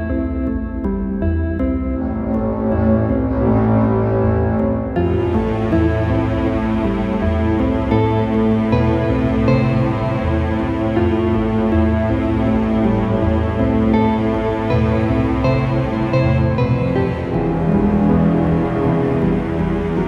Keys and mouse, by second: 2.2-4.5 drag, 10.1-13.6 drag, 13.6 middle click, 14.5 click, 15.0 right click, 17.2 right click, 19.6 ctrl+r.